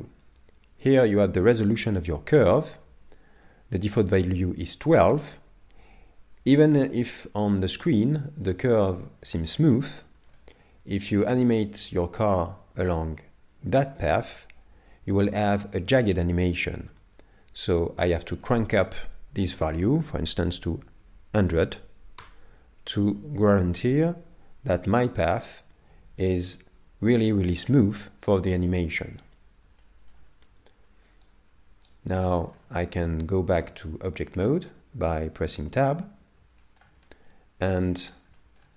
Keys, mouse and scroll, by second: 8.4-9.1 scroll up 2, 9.1 scroll down 1, 9.3-9.7 scroll down 3, 9.7 shift+middle click, 18.4 click, 21.0 KP_0, 26.2-28.2 scroll up 3, 28.2-28.6 scroll down 2, 28.9 shift+middle click, 29.4 scroll down 2, 29.8 shift+middle click, 31.3 right click, 32.2 shift+middle click, 33.0 scroll up 2, 35.7 Tab, 36.6 shift+middle click, 37.1 middle click, 38.3 shift+middle click.